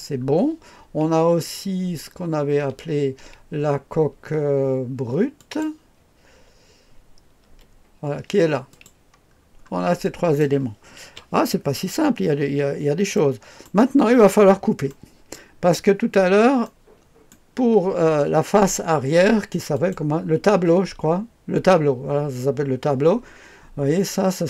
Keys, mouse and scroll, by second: 2.1-5.3 scroll up 2, 5.3 click, 7.4 space, 8.7 click, 9.3 scroll down 1, 10.0 click, 11.0 KP_2, 11.8-12.5 scroll down 1, 12.5-13.1 scroll up 1, 13.1 middle click, 13.6 right click, 14.0-14.9 scroll up 1, 14.9-15.9 right drag, 15.7-16.6 scroll up 1, 16.6 right click, 19.7 click.